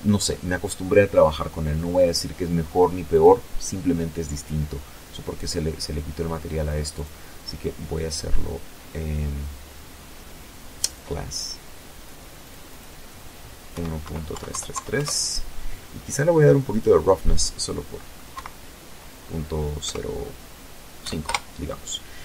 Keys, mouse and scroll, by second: 0.8 click, 2.1 click, 4.7 click, 8.6 click, 10.1 click, 11.4 KP_1, 11.7 KP_Decimal, 12.6 KP_3, 12.6 KP_Enter, 14.4 click, 16.0 KP_Decimal, 17.5 KP_0, 18.7 KP_5, 18.9 KP_Enter.